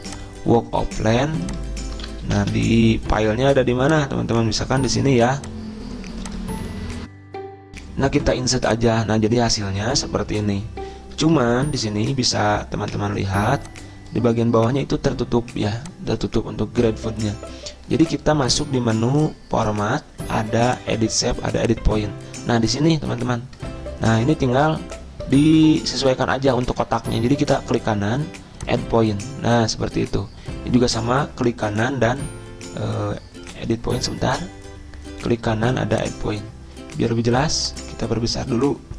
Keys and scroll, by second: 2.9 ctrl+v, 3.1 Return, 7.7 alt+Tab.